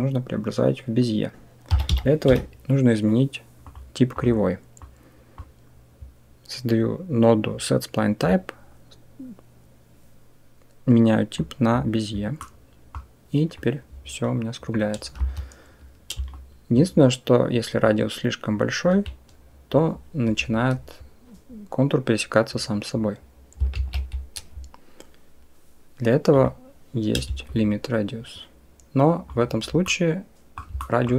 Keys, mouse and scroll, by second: 4.6-5.2 drag, 8.1-11.6 drag, 12.3 middle click, 12.4 click, 12.5 middle click, 12.6 click, 13.5-15.0 drag, 15.0 Escape, 18.0 shift+click, 23.6 ctrl+z, 26.2 click, 27.3-29.1 shift+drag, 29.7-30.4 middle drag, 30.6 shift+drag.